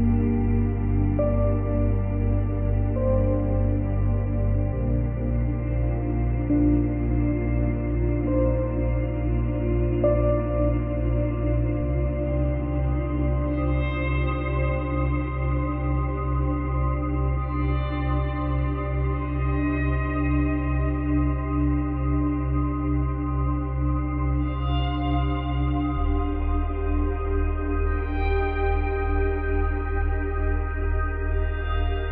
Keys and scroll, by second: 26.9 space, 28.3 space.